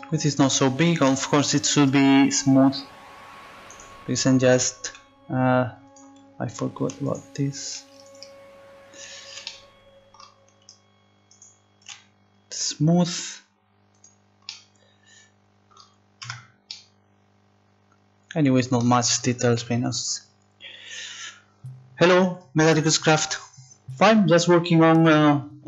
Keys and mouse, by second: 1.8 Tab, 8.6-9.6 right drag, 9.6 middle click, 12.4 right click, 12.9-14.6 drag, 14.7 click, 15.0 right click, 16.3 Tab.